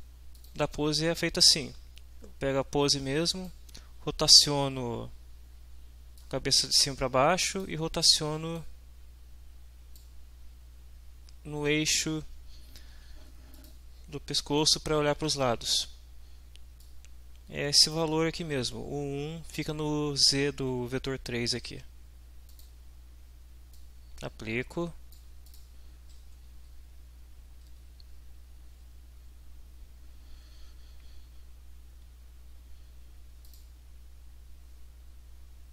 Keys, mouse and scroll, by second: 0.3 click, 2.9 click, 6.2-7.8 drag, 8.6-10.2 drag, 13.6 click, 16.8-18.1 drag, 22.5 click, 23.7-25.4 drag, 25.5 click, 26.5 Down, 27.8 Up, 33.4 click.